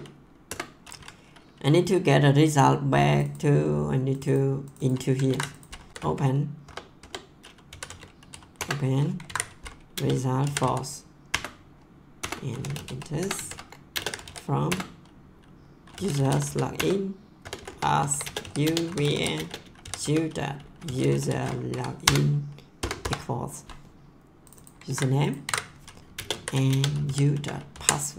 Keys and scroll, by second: 0.4 Return, 5.3 ctrl+c, 5.9-8.3 typing, 8.5 Return, 9.2 ctrl+v, 9.9-11.1 typing, 11.2 Return, 12.3-21.6 typing, 21.7 Down, 22.0 Return, 22.7 BackSpace, 23.0 =, 24.8 ctrl+c, 25.4 ctrl+v, 26.1-28.1 typing.